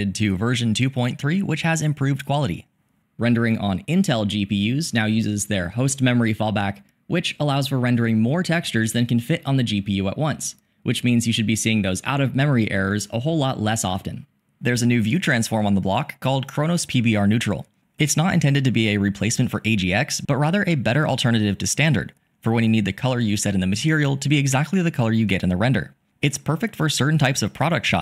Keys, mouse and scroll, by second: 14.8-16.8 drag, 19.7 click.